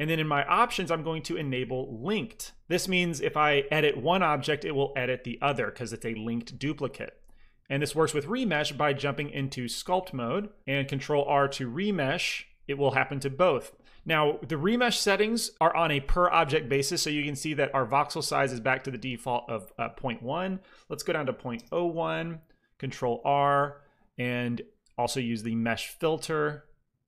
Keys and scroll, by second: 5.3 Tab, 11.1 ctrl+r, 21.4 KP_0, 21.6 KP_1, 21.8 Return, 22.9 ctrl+r.